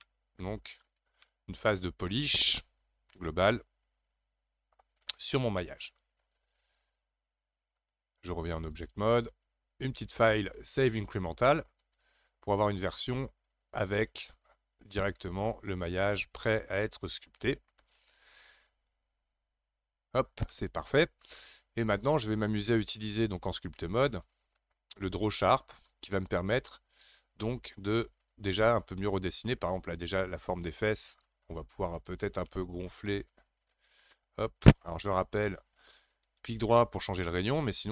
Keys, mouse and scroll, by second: 0.7-1.3 scroll down 2, 1.3-4.3 middle drag, 7.7-19.5 drag, 20.5-23.3 middle drag, 23.3-27.4 drag, 27.4-29.8 middle drag, 29.8-30.7 scroll up 4, 30.7-31.9 middle drag, 31.9-34.9 drag, 34.9 ctrl+z, 35.4 ctrl+z, 36.2-37.9 right drag.